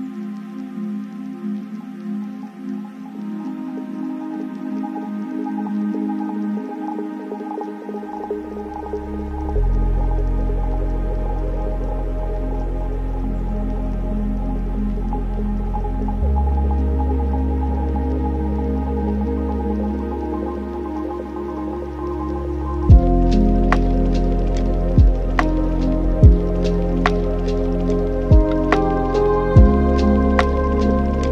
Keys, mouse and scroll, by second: 0.9-3.6 middle drag, 3.6-7.6 drag, 7.6 n, 9.1-10.8 middle drag, 10.8 click, 11.7-14.0 middle drag, 14.0-15.1 ctrl+right drag, 15.1 shift+a, 18.6-19.7 alt+right drag, 19.7 middle click, 20.5 click, 21.6 shift+a, 25.3 middle click, 26.0 shift+a, 28.5 drag, 30.4-31.3 middle drag.